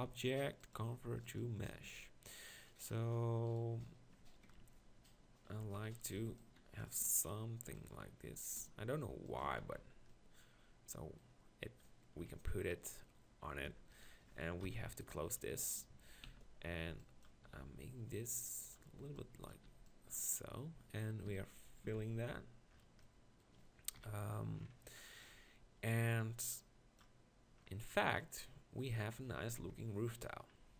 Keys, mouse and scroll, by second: 1.8 Tab, 4.5 ctrl+KP_Decimal, 5.6 z, 6.2 b, 7.0 e, 8.3 s, 9.4 Tab, 9.6 z, 12.2 KP_1, 13.7 Tab, 14.6 ctrl+KP_Decimal, 16.3 z, 16.8 b, 17.4 g, 19.0 b, 19.6 b, 21.3 f, 21.8 Tab, 22.0 z, 24.0 KP_1, 29.6 KP_7.